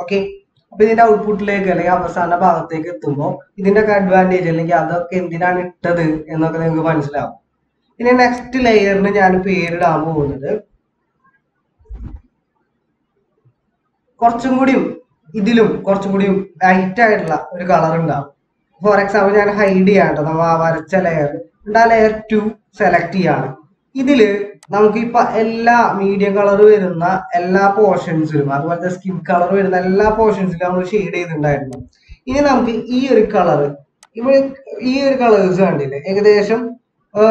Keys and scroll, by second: 11.9 BackSpace, 18.4 ctrl+=, 21.0 ctrl+=.